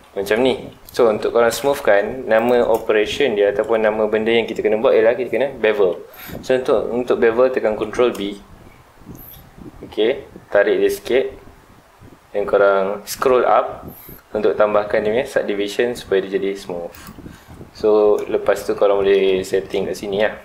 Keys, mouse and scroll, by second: 1.0 Tab, 1.4 middle click, 1.8 3, 2.3 click, 2.8 shift+middle click, 3.2-3.5 scroll up 1, 3.5-6.6 middle drag, 7.8 ctrl+b, 17.0 shift+click, 18.7-20.4 middle drag.